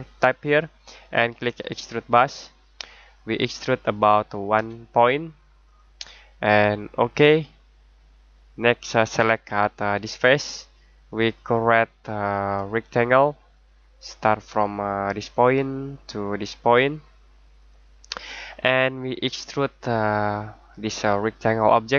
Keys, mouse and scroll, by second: 0.2 click, 4.5 1, 5.6 click, 10.1 click, 20.2 click.